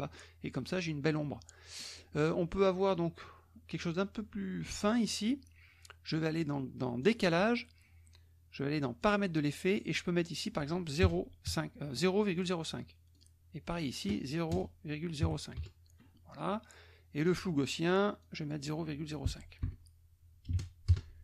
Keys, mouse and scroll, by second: 7.1 click, 9.0 click, 10.2 click, 11.0 KP_0, 11.4 KP_5, 13.1-14.2 drag, 14.5 KP_0, 15.2 KP_5, 15.6 KP_Enter, 17.2 click, 18.2 click, 19.6 BackSpace, 20.5 KP_5, 21.1 KP_Enter.